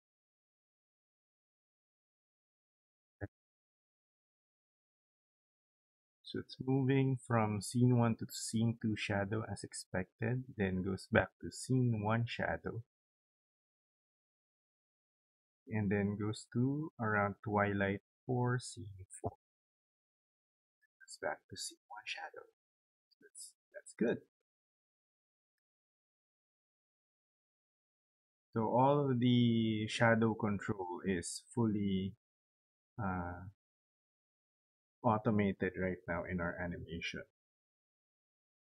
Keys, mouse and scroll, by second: 23.6 click, 25.8 click, 26.0 click.